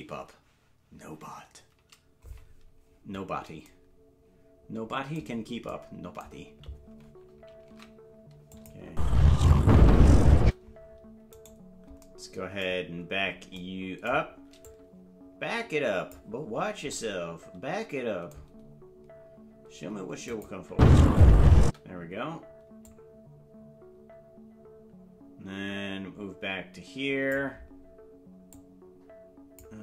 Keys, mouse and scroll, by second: 7.7 ctrl+Tab, 8.6 click, 8.8 space, 11.4 right click, 14.7 click, 15.5 click, 20.3 click, 20.6 space, 22.9-27.4 drag, 28.5-29.6 drag.